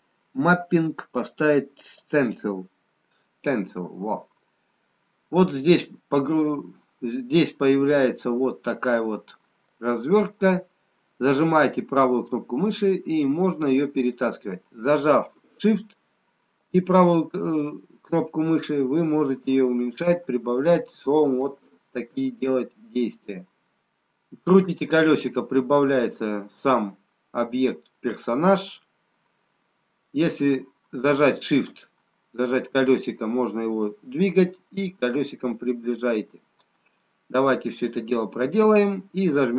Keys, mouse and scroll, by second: 11.5 right click, 17.0 shift+right click, 24.5-26.7 scroll down 2, 27.3-28.6 scroll down 2, 30.0 shift+middle click, 35.3-37.3 scroll up 2, 37.3 shift+middle click, 37.3 scroll up 2.